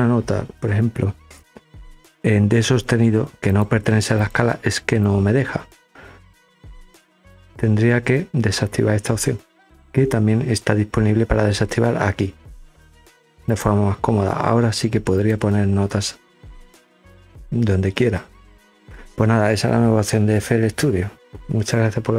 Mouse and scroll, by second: 3.0 click, 3.7 click, 4.6-5.8 drag, 6.4 click, 13.0 click, 14.7 click, 15.7 click.